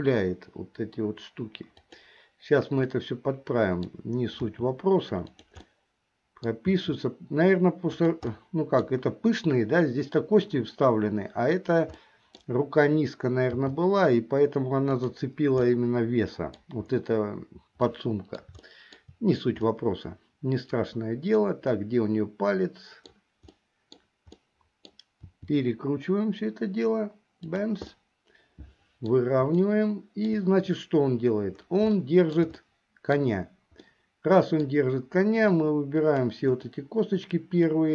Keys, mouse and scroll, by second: 2.9-4.1 middle drag, 4.6 r, 5.8 middle click, 6.8 r, 8.5 middle click, 12.1 middle click, 13.7 g, 15.8 middle click, 18.0 scroll up 1, 18.1 middle click, 18.7 shift+middle click, 19.8 scroll up 1, 19.9-23.3 middle drag, 23.7 middle click, 24.5 middle click, 25.4 r, 28.0-29.2 middle drag, 29.8 shift+middle click, 32.1 shift+middle click, 32.7 middle click, 34.0 middle click, 35.6 click, 36.8-37.9 middle drag.